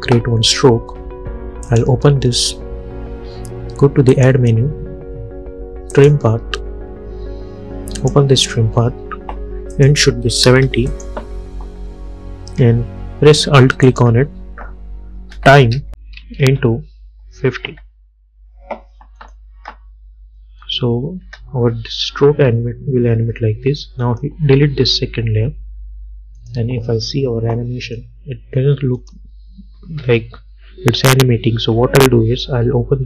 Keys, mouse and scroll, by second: 1.8 click, 4.2 click, 14.0 alt+click, 15.1-18.3 typing, 19.3 click, 19.7 space, 22.5 u, 24.1 click, 26.5-29.1 drag.